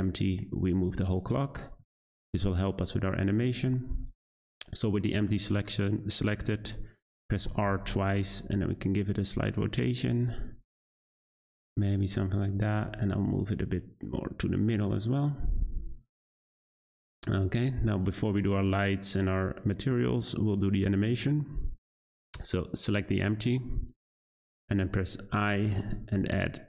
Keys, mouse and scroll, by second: 2.2 `, 3.8-5.9 scroll up 1, 5.9-6.9 scroll up 2, 6.9-7.4 scroll down 1, 7.4 r, 12.6 g, 16.8 click, 17.3-17.6 scroll down 2, 17.9-19.0 scroll up 1, 19.0-22.7 drag, 25.3 i.